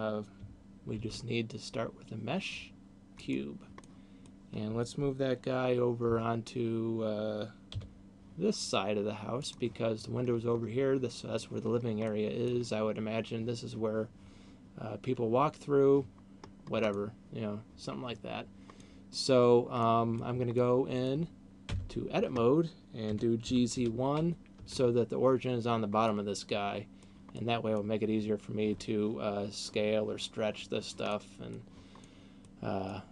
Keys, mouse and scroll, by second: 1.3 shift+a, 4.3 middle click, 6.5 g, 10.0 click, 12.3 middle click, 16.5-17.3 scroll up 1, 17.3 middle click, 19.3 middle click, 20.3 middle click, 21.0 middle click, 22.0 Tab, 23.3 g, 26.3 middle click, 27.8 middle click, 31.3 middle click, 32.3 middle click.